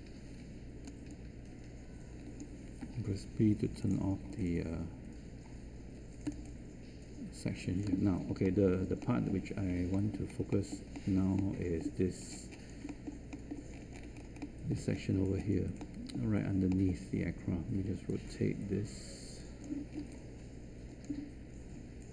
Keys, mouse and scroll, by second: 3.4 b.